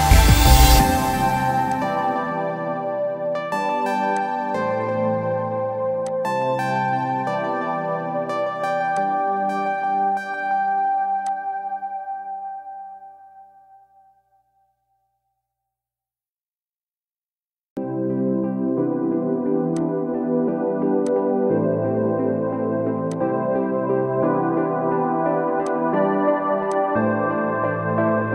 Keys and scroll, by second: 0.2 Caps_Lock.